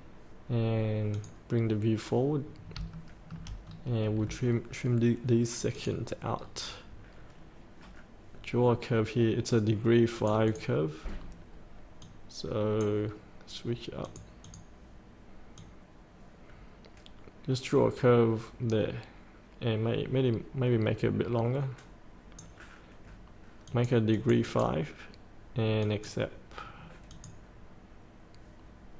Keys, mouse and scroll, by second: 2.4 scroll down 1, 2.9 shift+middle click, 3.6 scroll down 1, 5.7 click, 6.3 scroll down 1, 10.1-28.1 drag.